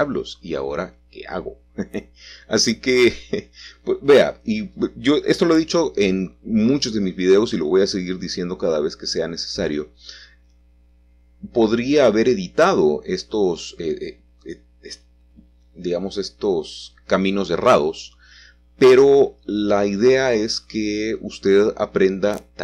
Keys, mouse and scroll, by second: 0.9-3.0 shift+middle drag, 3.0 alt+shift+click, 3.4-4.4 scroll down 2, 4.4-5.6 middle drag, 5.6 alt+shift+click, 7.6 alt+shift+click, 11.0-12.3 scroll up 2, 12.3 shift+middle click, 13.8 c, 14.1-18.9 middle drag, 16.5 Escape, 19.3 click, 20.8 c, 21.2 middle click, 21.9 Escape.